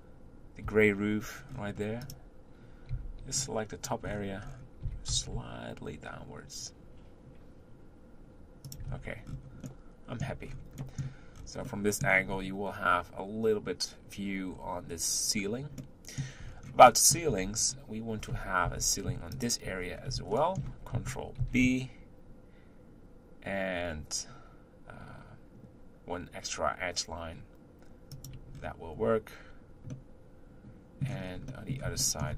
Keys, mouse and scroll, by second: 0.7 Tab, 1.6-2.0 scroll down 4, 2.0 click, 2.9 b, 4.0-4.8 scroll up 12, 4.8 g, 8.9 Tab, 9.2-9.6 scroll down 5, 9.6-10.4 middle drag, 10.4-10.8 scroll up 5, 10.8 middle click, 11.3-11.7 scroll down 4, 11.7-12.3 middle drag, 12.3-14.7 scroll up 4, 14.7-15.8 scroll up 3, 15.8-16.5 middle drag, 16.5-16.8 scroll down 2, 16.8-17.3 middle drag, 17.3 Tab, 17.6 scroll up 2, 18.6 1, 19.3 alt+click, 19.8 scroll up 2, 20.3-21.4 shift+middle drag, 21.4 ctrl+b, 28.8-29.9 scroll down 4, 29.9-31.2 middle drag, 31.2 scroll down 1, 31.5 middle click.